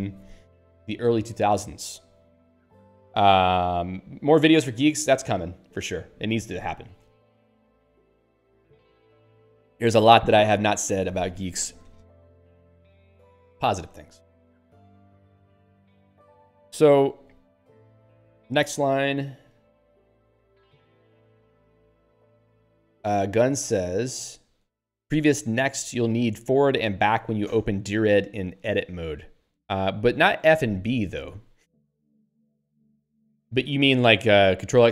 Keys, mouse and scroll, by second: 13.2 click, 13.4 click, 16.0 Down, 32.4 q.